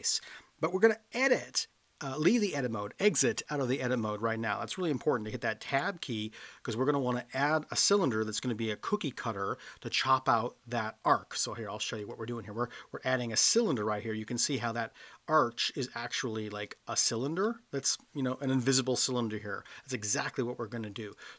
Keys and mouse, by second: 5.6 Tab, 12.0 click, 14.6-15.9 middle drag, 17.4-17.8 middle drag, 21.1 click.